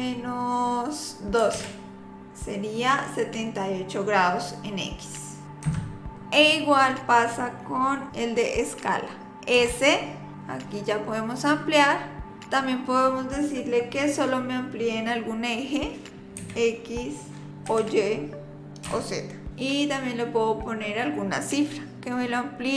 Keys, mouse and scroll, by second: 9.6 s.